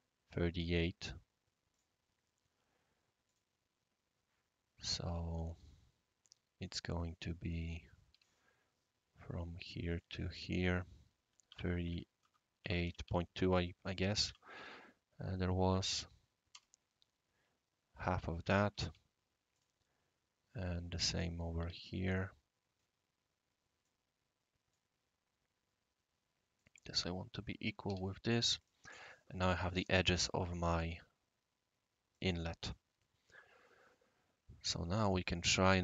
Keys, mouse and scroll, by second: 1.7 click, 3.2 click, 7.6 click, 8.1 q, 9.9 click, 10.8-13.0 typing, 14.1 typing, 16.5 Return, 18.7 i, 18.8 i, 19.5 click, 21.2 click, 21.6 Escape, 23.8 click, 26.5 click, 27.0 click, 27.6-28.4 typing, 28.6 click, 30.4 click, 32.1 click, 32.6 click, 33.1 click.